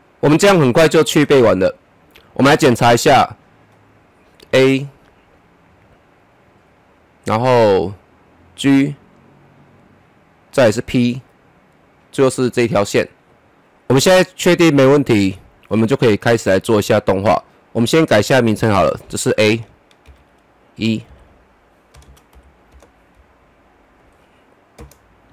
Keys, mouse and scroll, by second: 1.9-11.7 click, 13.6-14.6 scroll up 1, 14.6 click, 18.7 Return, 20.1-21.0 typing, 22.3 typing, 22.7 Return, 23.8 click, 24.8 Return.